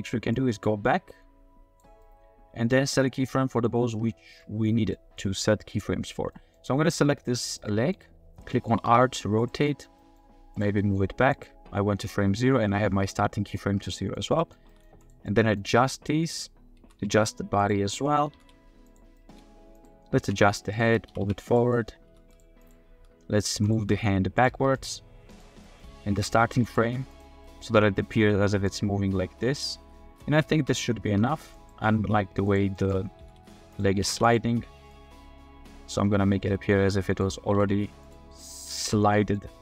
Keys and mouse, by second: 0.3-1.8 middle drag, 2.0-3.7 middle drag, 4.1 middle drag, 4.3 click, 4.9 click, 6.3 click, 7.6-7.9 drag, 8.5 drag, 8.7 r, 8.8 z, 9.6 click, 9.9 g, 10.8 drag, 13.9 drag, 14.4 click, 14.7 g, 15.2 drag, 15.3 middle drag, 16.8 g, 17.0 z, 18.0 middle click, 18.3 r, 18.3 z, 19.2 click, 19.7 click, 20.2 alt+r, 20.6 click, 20.8-24.5 typing, 21.7 middle click, 22.6 click, 25.6 middle click, 26.1 r, 26.3 r, 26.8 r, 27.4 click, 28.7-30.2 drag, 30.5 space, 31.0 space, 31.5 click, 32.5 click, 32.7 shift+middle click, 33.1 r, 33.2 z, 34.0 r, 34.0 z, 34.9-37.2 drag, 37.4 r, 37.5 z, 38.4-38.9 shift+middle drag, 39.2 middle click.